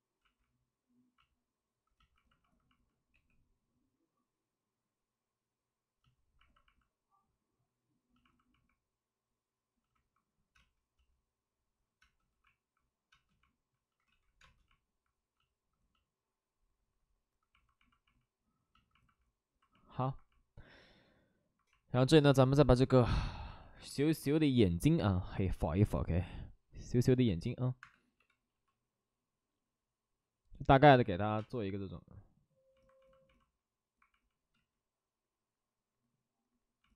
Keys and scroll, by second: 3.1 3, 10.5 space, 10.6 space, 12.0 space, 12.3 1, 13.1 space, 14.0 ctrl+z, 14.4 space, 25.9-26.6 typing, 27.8 Escape, 28.1 b, 28.4 p, 31.3 space, 34.2 space, 34.5 ctrl+z.